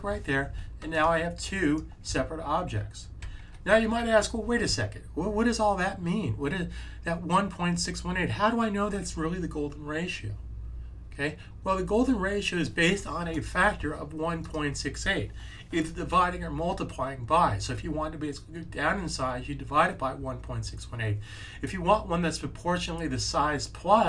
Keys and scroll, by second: 3.1 super+z.